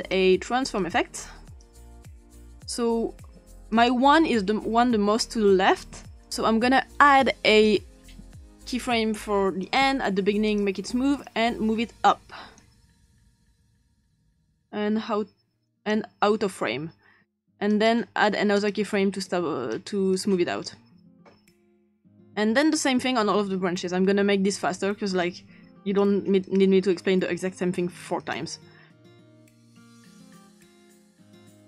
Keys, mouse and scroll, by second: 0.0 click, 2.2 click, 3.7 click, 6.3 click, 6.5 click, 9.6 click, 17.7 click, 18.6 click, 19.2 click, 20.2 click, 22.8 click, 23.8 click, 24.2 click, 24.5 click, 25.4-27.7 drag, 28.2 click, 28.8 click, 29.0 click, 30.0 click, 30.6 click, 31.3-31.6 drag.